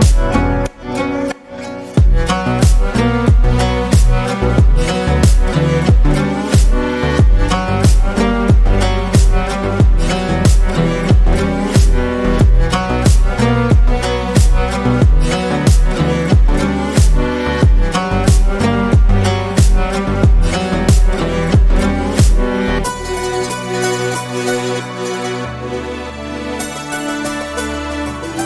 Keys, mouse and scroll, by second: 2.7 ctrl+r, 3.6 shift+middle click, 4.0 scroll up 2, 5.0-6.8 middle drag, 7.4 middle click, 8.1 click, 8.6 shift+click, 9.6 click, 11.6 ctrl+click, 12.3 click, 13.5 Tab, 13.9-14.7 middle drag, 14.7 KP_Decimal, 15.2-15.7 scroll up 2, 15.7 Tab, 16.0 middle click, 16.9 ctrl+z, 17.2 ctrl+z, 18.0 middle click, 18.7 shift+click, 20.0 click, 20.5 click, 21.3 ctrl+click, 21.8-23.0 shift+middle drag, 23.0 click, 25.4 Tab, 25.6-27.0 middle drag, 27.0 Tab, 27.7 click, 28.0-28.4 middle drag.